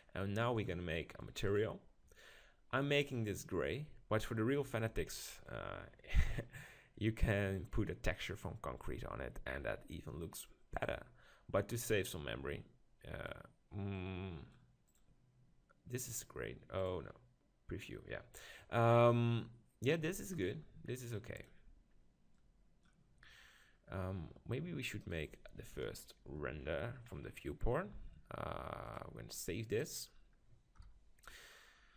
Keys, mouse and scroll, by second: 0.6-4.7 drag, 10.8-12.6 drag, 14.9-18.6 drag, 21.4-23.3 drag, 25.0-26.6 right drag, 25.8 KP_7, 26.6-30.4 middle drag, 28.8-30.8 drag, 31.0 KP_0.